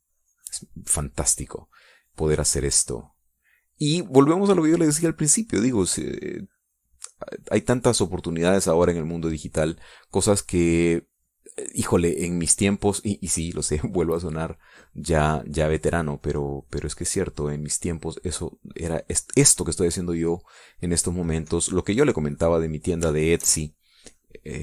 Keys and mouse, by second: 6.4-10.6 drag, 14.5 click, 17.0-20.4 drag, 22.4-24.4 drag.